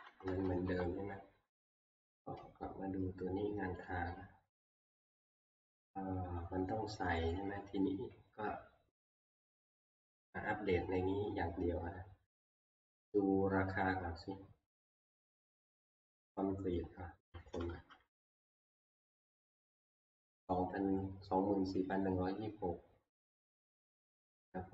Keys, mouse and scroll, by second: 0.0 Right, 0.3 Right, 0.5 Right, 0.7 Right, 3.8 Delete, 3.9 click, 7.3 click, 8.9-12.3 drag, 12.8-16.1 middle drag, 12.8-13.9 scroll down 1, 13.9-15.7 scroll down 1, 15.7-16.1 scroll down 1, 16.1-17.8 scroll.